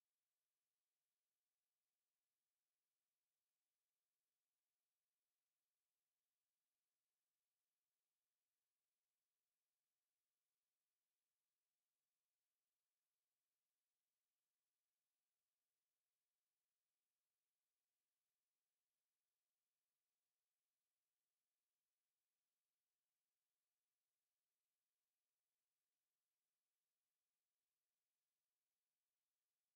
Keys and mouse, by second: 1.4 alt+click, 1.5 alt+click, 1.7 alt+right click, 2.6 alt+right click, 4.4 alt+click, 6.9 alt+click, 9.7 click, 11.4 shift+click, 11.8 shift+click, 11.8 shift+click, 13.0 alt+middle click, 13.4 alt+right click, 13.8 shift+right click, 15.3 click, 17.4 click, 18.1 click, 19.3 alt+click, 20.1 click, 20.7 alt+click, 21.1 alt+click, 25.0 click, 29.2 click.